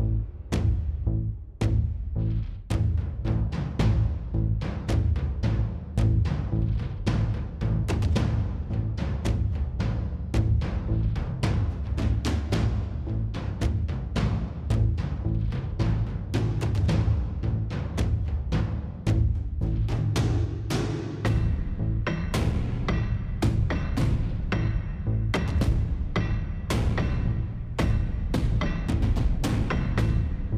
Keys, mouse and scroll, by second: 2.2 click, 3.0 middle click, 3.2 click, 3.4 click, 3.9 click, 4.3 click, 5.0 click, 5.5-6.5 drag, 6.5-7.7 middle drag, 7.7 s, 9.5 s, 10.6 click, 11.3 click, 12.1-14.1 middle drag, 12.7 scroll up 1, 14.7 middle click, 15.1 middle click, 15.7 middle click, 16.0-17.0 middle drag, 17.6 middle click, 18.2 KP_1, 18.4 middle click, 18.7 click, 19.1 middle click, 19.3 click, 19.6 Tab, 19.8 click, 20.5 click, 21.5 click, 21.7 a, 22.1-23.2 drag, 23.3 s, 25.0 s, 26.9 click, 27.4 middle click, 28.9 middle click, 29.6 middle click, 29.7 click.